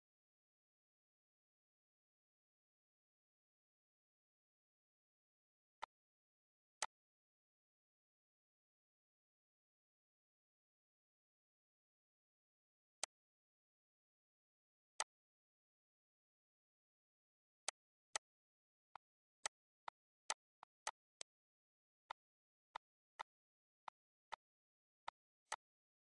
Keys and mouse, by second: 5.5 shift+click, 6.4 shift+click, 12.9 click, 14.9 click, 17.5 shift+click, 18.6 shift+click, 23.1 shift+click, 23.7 shift+click, 24.8 shift+click.